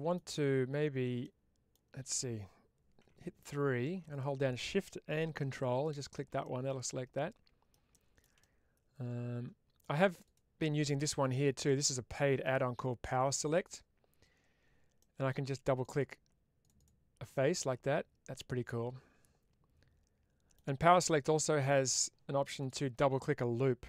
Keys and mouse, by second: 1.1 middle click, 2.9 3, 4.0 click, 6.3-7.6 middle drag, 8.4-9.7 middle drag, 10.1 click, 13.4 click, 14.9 middle click, 15.7 click, 16.5 click, 17.3-20.4 middle drag, 22.5 click.